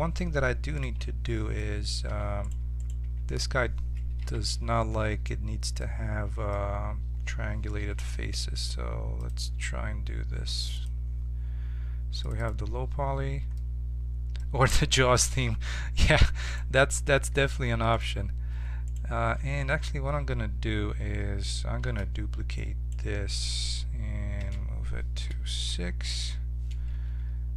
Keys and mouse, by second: 0.8-2.4 middle drag, 2.0 2, 2.4 click, 3.0 Tab, 3.1-4.1 right drag, 4.1 ctrl+t, 8.0 Tab, 9.1-10.8 drag, 12.3-13.7 drag, 15.1 1, 21.8 shift+d, 24.3 m, 26.1 6.